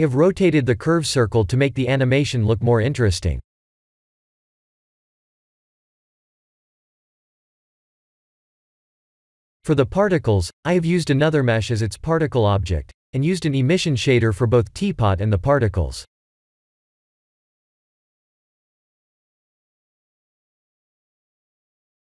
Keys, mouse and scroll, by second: 1.8-2.6 middle drag, 3.2 KP_1, 5.0-6.9 middle drag, 9.1 click, 20.8 click.